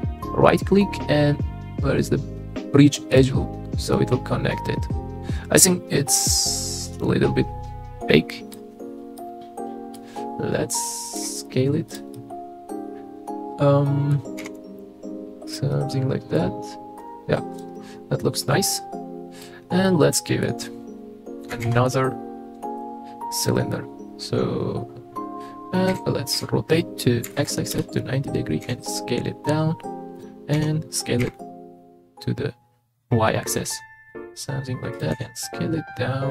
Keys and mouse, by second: 3.9-8.5 middle drag, 9.2 middle click, 11.2 s, 11.9 click, 12.1-14.0 middle drag, 14.1 middle click, 14.4 s, 14.6 x, 15.7 middle click, 17.0 Tab, 17.5 right click, 17.8-19.4 middle drag, 19.9-20.4 middle drag, 21.6 shift+a, 25.9 r, 26.3 x, 27.3 KP_9, 27.3 KP_0, 27.7 KP_Enter, 28.6 s, 30.2 click, 30.5 s, 31.2 y, 35.1 s.